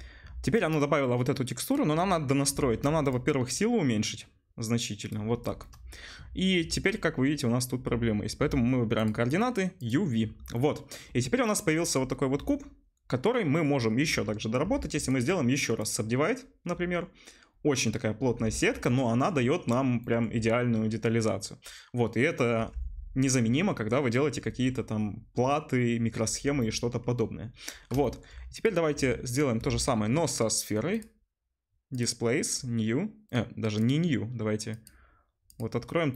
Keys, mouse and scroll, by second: 1.7 middle click, 3.1-5.7 shift+middle drag, 10.5-14.7 middle drag, 14.7 Tab, 17.6 middle click, 18.5 Tab, 21.8-28.2 middle drag, 28.3 middle click, 28.6-31.1 drag, 31.1-36.1 middle drag.